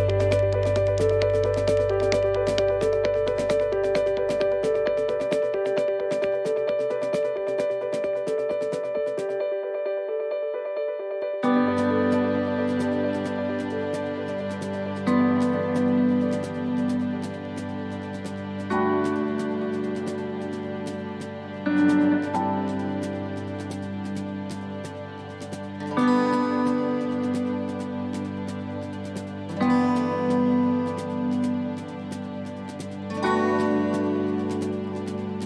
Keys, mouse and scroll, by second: 0.5 right click, 0.7 shift+right click, 1.7 middle click, 2.4 scroll down 1, 4.4 e, 6.7 click, 8.7 middle click, 9.0 scroll down 2, 9.5 shift+middle click, 10.0 scroll up 2, 10.5 shift+middle click, 11.1 middle click, 13.5 ctrl+r, 21.5 middle click, 22.5 shift+middle click, 23.1 middle click, 23.8 shift+middle click, 24.2 scroll up 3, 24.5 middle click, 27.0 middle click, 29.1 click, 30.4 right click, 30.6 middle click, 32.0 shift+right click, 32.3 middle click, 33.4 click.